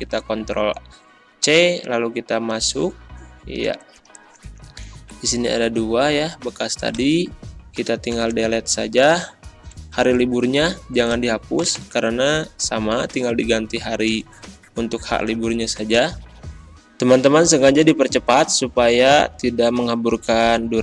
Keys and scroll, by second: 8.1 BackSpace, 11.7 Return, 12.4 Up, 14.1 ctrl+v, 18.0 c, 18.1 m, 18.3 Return, 19.2 ctrl+z, 19.9 a, 20.0 m, 20.1 Return.